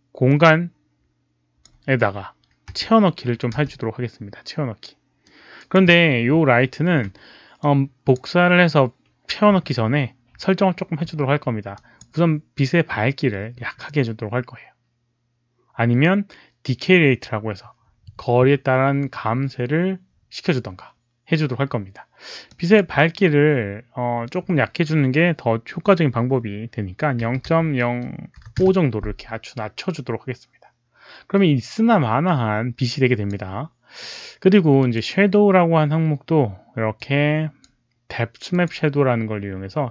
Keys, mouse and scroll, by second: 0.2-1.6 drag, 0.3 4, 0.3 space, 2.7 click, 2.7 middle click, 2.7-4.0 typing, 3.5 click, 3.5 middle click, 5.2 click, 7.5 click, 11.7 click, 22.4 click, 27.1-28.3 typing, 28.3 click, 28.5 Return, 32.8 click, 34.7 click, 36.9-37.5 drag, 38.4 Return, 38.4 click, 38.4 KP_5.